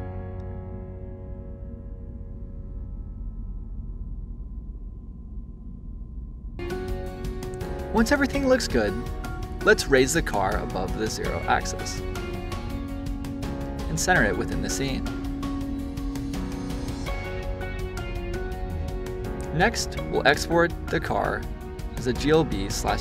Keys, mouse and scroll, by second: 0.9 click, 2.2 click, 3.0 scroll down 1, 3.2-6.2 shift+middle drag, 6.2 click, 8.3 click, 12.1 click, 15.2 click, 15.7-17.1 middle drag, 17.1 click, 19.5-22.7 drag.